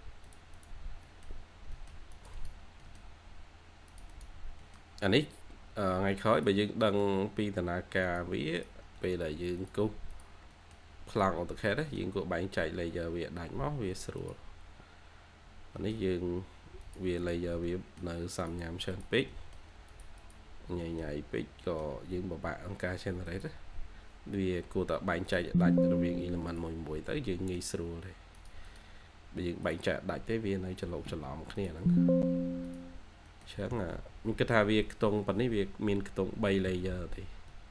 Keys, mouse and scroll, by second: 0.7 scroll down 1, 0.9 scroll up 1, 0.9 middle click, 2.5 scroll down 1, 2.7 middle click, 3.3-4.0 scroll up 1, 4.3-5.2 scroll down 2, 4.5 middle click, 5.2-6.3 scroll up 1, 6.3 double click, 6.7 middle click, 8.9 middle click, 9.1 scroll down 1, 10.5 middle click, 11.6 middle click, 15.3-15.7 scroll down 1, 15.7 middle click, 16.2-17.1 scroll up 1, 17.1 double click, 17.6 middle click, 19.2 middle click, 20.1 double click, 20.4 scroll down 1, 20.6 scroll up 1, 20.7 middle click, 22.1-22.4 scroll up 1, 22.4-23.4 scroll down 1, 26.9-27.2 scroll down 1, 27.2 middle click, 27.8-28.2 scroll up 1, 28.6 double click, 33.2 middle click, 33.5 2, 35.4 scroll up 1, 35.8 2, 36.2 scroll, 36.3 scroll up 1, 36.5 2, 36.8-37.1 scroll down 1, 37.1-37.4 scroll, 37.4 2.